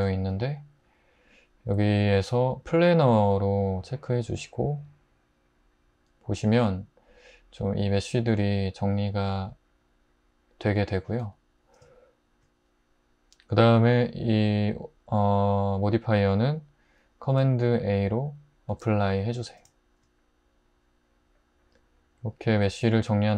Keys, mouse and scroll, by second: 11.2 scroll, 18.7 super+a.